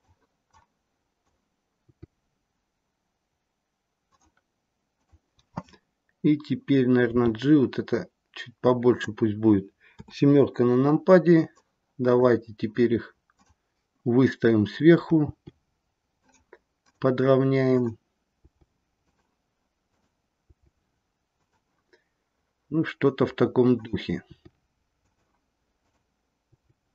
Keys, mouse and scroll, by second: 0.4 click, 1.8 g, 4.8 click, 7.1 g, 9.9 KP_7, 11.5 click, 13.2 click, 15.2 g, 16.7 click, 17.6 click, 18.4 g, 19.8 click, 20.4 g, 23.6 click, 24.2 g, 25.7 click, 26.4 g.